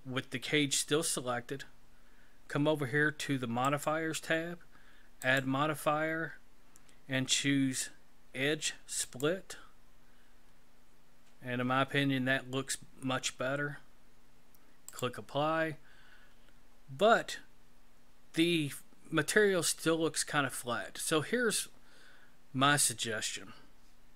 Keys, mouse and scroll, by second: 3.7 click, 5.2 click, 14.9 click.